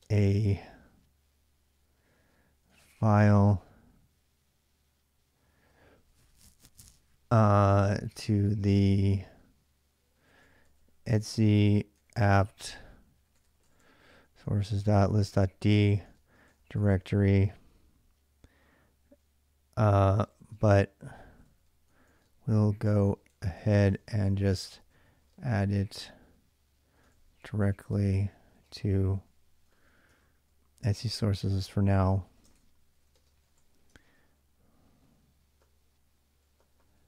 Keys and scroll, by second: 0.0-0.2 typing, 2.1-3.0 typing, 7.4-8.7 typing, 9.8-17.5 typing, 19.6-37.0 typing.